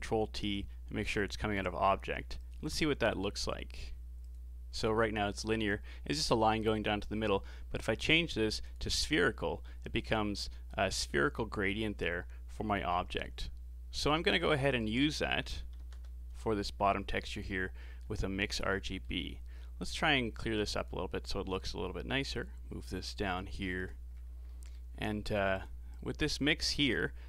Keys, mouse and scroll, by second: 1.1-2.5 drag, 4.2-7.2 drag, 12.9-14.3 middle drag, 14.3 shift+a, 17.8 middle click, 18.5-18.8 scroll down 2, 18.8-19.2 middle drag, 19.2-20.2 scroll down 7, 20.4 click, 21.5 click, 23.2 g, 24.2 scroll up 5, 24.4-24.9 middle drag, 24.9-25.3 scroll up 4, 25.5 click, 25.9-27.2 drag.